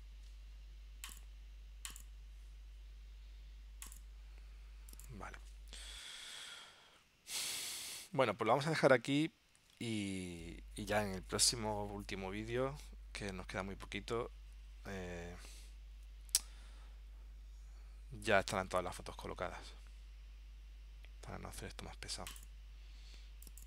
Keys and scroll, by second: 6.5 super+Tab, 9.8 super+Tab.